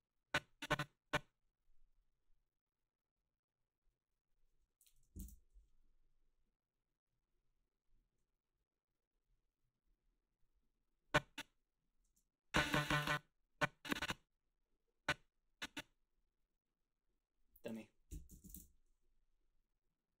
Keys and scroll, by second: 5.2 Return, 12.1 space, 12.8 space, 17.9-18.9 typing.